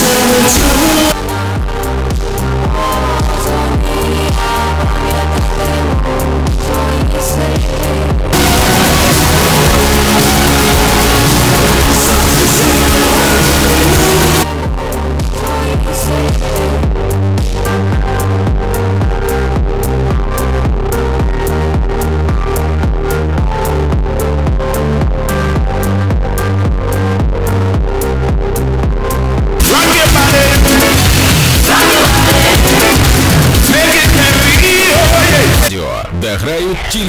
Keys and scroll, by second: 1.1 Page_Down, 14.4 Page_Down, 35.6 Page_Down.